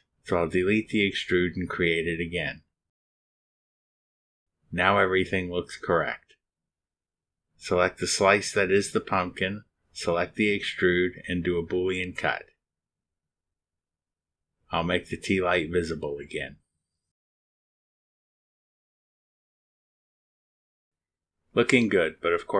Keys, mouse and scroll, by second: 0.1 Delete, 0.9 click, 1.8 click, 2.5-3.4 typing, 4.1 click, 7.8 click, 7.9 right click, 9.6 right click, 10.4 ctrl+click, 13.2 click, 14.8 click, 15.0 space, 16.3 scroll up 1, 16.9 scroll up 1, 17.5-20.8 drag, 17.8-20.5 right drag.